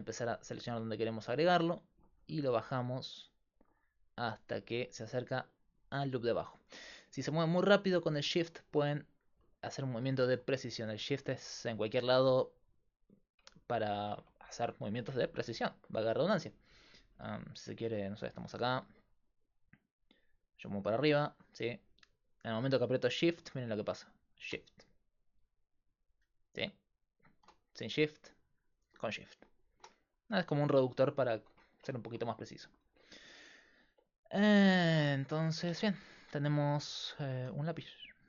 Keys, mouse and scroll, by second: 13.7-18.5 middle drag, 18.5-29.8 drag, 30.6 middle click, 31.4 Tab, 35.7 Tab, 37.1 right click, 37.5 s.